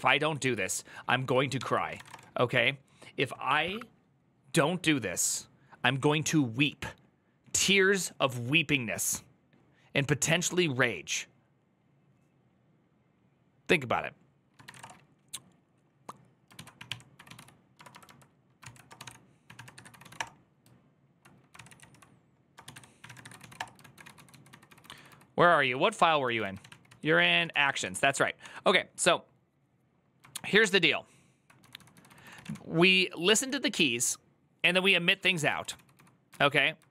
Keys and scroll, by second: 0.2 alt+{, 1.2-2.4 typing, 16.1-23.7 typing, 18.4 ctrl+c, 23.8 ctrl+k, 24.0 ctrl+j, 24.3 ctrl+k, 24.6 ctrl+k, 24.7 ctrl+k, 26.0 ctrl+j, 26.4 ctrl+w, 26.4 ctrl+o, 26.7 ctrl+c, 27.0-27.8 typing, 27.9 ctrl+d, 28.4 ctrl+d, 31.4 ctrl+d, 31.4-33.0 typing, 35.1-36.0 typing, 36.1 ctrl+u, 36.7 ctrl+d.